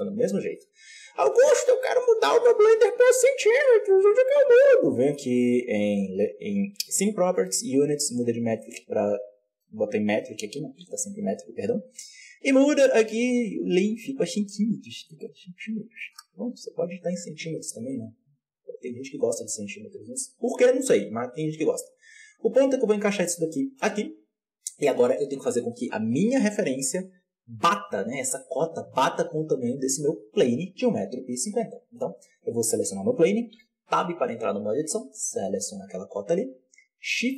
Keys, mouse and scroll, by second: 21.0 g, 24.3-24.9 scroll down 1, 24.9 right click, 32.5 right click, 33.7 Tab, 34.5-37.3 drag.